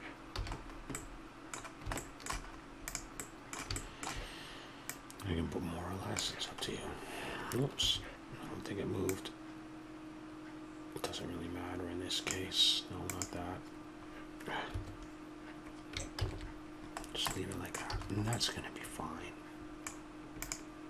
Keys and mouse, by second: 0.3 a, 2.8 right click, 3.6 click, 3.9 middle click, 4.0 click, 4.7-6.7 middle drag, 13.1-15.0 drag, 16.1 ctrl+z, 17.9 a, 20.4-20.8 drag.